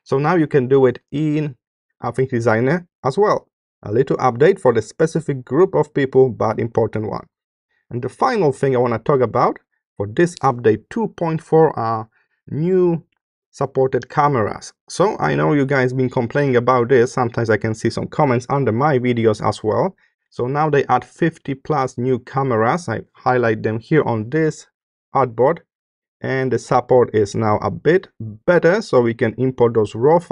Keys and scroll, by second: 7.1 space, 10.4 space.